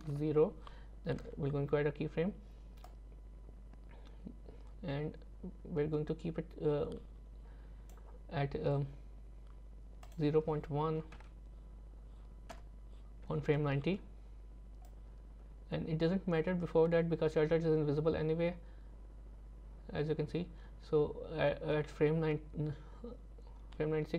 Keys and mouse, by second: 2.9-7.9 drag, 10.2-12.6 drag, 14.9-24.1 drag.